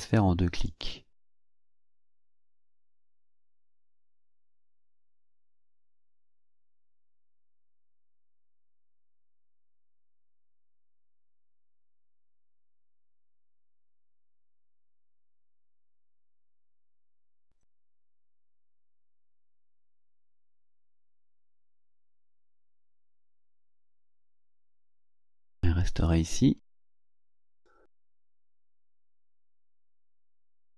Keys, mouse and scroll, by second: 0.7 click, 1.3 click, 3.9 click, 5.0-8.7 drag, 9.8-14.1 drag, 16.8 click, 18.7 click, 21.1 click, 21.8 click, 22.3 click, 23.5 click, 24.2-25.2 ctrl+scroll down 6, 25.9-26.2 scroll up 2, 26.2-26.8 scroll down 4, 27.2-27.8 ctrl+scroll up 4, 28.2-28.5 ctrl+scroll up 1, 28.8-29.2 scroll down 1, 29.8 click, 30.7 scroll up 2.